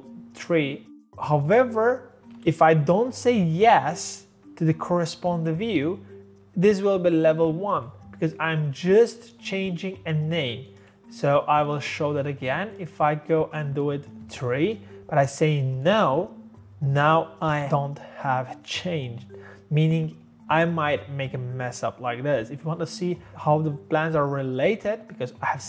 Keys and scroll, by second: 0.6 3, 7.7 ctrl+z, 14.2 3.